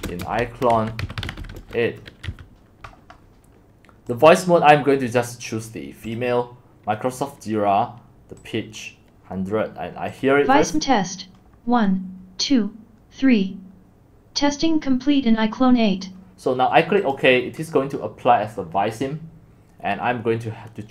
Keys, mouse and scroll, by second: 0.0-2.3 typing, 4.2-16.1 drag, 17.1-20.9 drag.